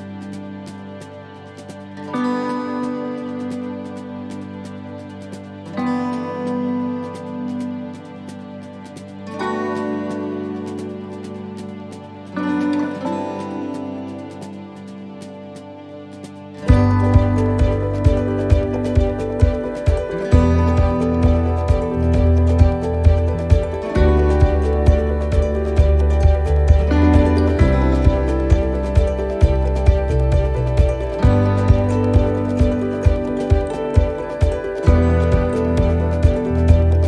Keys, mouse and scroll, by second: 1.0 s, 5.8 click, 9.1 middle click, 9.9-10.3 scroll up 2, 10.4 middle click, 11.0 shift+middle click, 12.1 s, 13.8 middle click, 14.3 shift+middle click, 14.7-15.1 scroll up 2, 15.6 click, 16.8 scroll down 1, 16.9 scroll up 1, 17.6 ctrl+r, 18.8 middle click, 19.1-19.5 scroll up 2, 21.1 click, 21.9 right click, 23.1 e, 26.1 scroll down 1, 27.5 click, 28.9 middle click, 29.3 scroll down 1, 31.4 l, 31.7 middle click, 33.0 shift+d, 34.3 click.